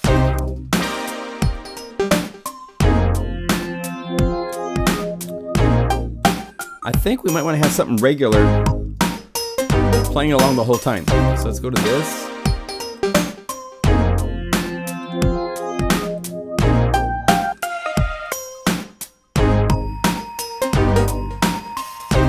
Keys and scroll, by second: 8.8 ctrl+m.